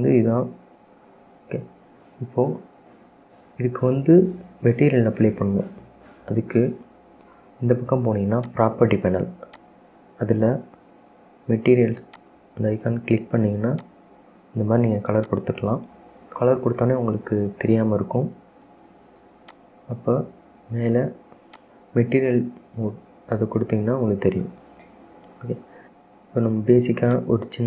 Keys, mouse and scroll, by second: 5.5 Tab, 5.6 click, 8.6 click, 9.6-12.9 drag, 15.3 click, 20.7 click, 21.7 click, 22.3-22.7 scroll up 2, 22.7 scroll down 1, 23.0-26.1 middle drag, 27.3 click.